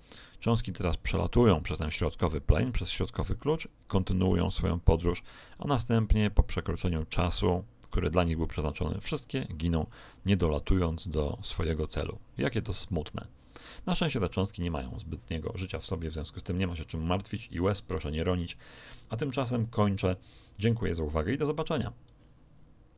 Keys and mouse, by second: 11.4 right click, 12.7 click, 13.0-14.6 middle drag, 16.6-20.2 middle drag.